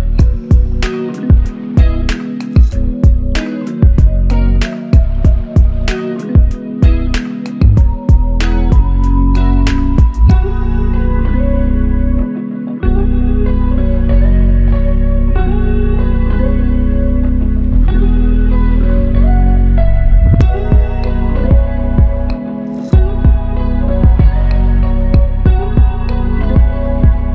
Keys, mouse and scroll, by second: 0.5 ctrl+click, 6.5 shift+click, 8.7 shift+click, 9.3 shift+click.